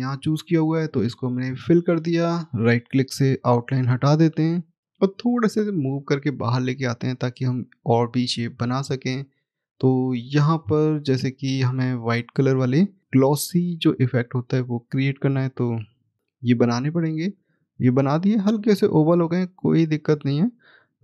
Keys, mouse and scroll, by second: 0.0 click, 3.3 right click, 4.8-5.3 scroll down 1, 5.3 click, 6.8 middle click, 9.2 middle click, 9.3 click, 16.2 right click, 17.3 click, 18.4-20.2 scroll up 1, 20.2 click.